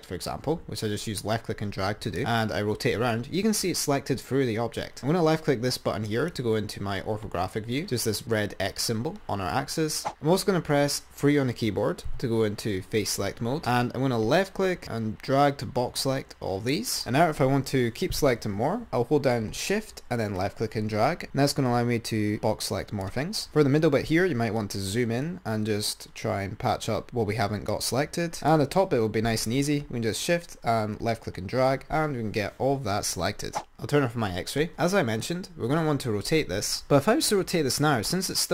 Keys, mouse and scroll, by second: 2.4 click, 6.3 click, 10.3 click, 12.5 3, 13.5 scroll down 2, 13.7 click, 20.6 shift+click, 23.6-24.6 scroll up 5, 23.9 middle click, 24.8 shift+click, 28.3-30.8 drag, 33.8-34.6 drag.